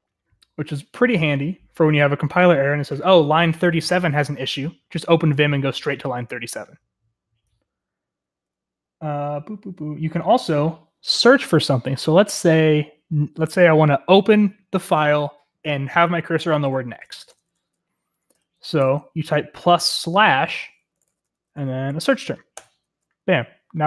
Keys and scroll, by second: 16.8-17.7 typing, 18.3 Up, 18.8 BackSpace, 20.0-22.4 typing, 22.5 Return.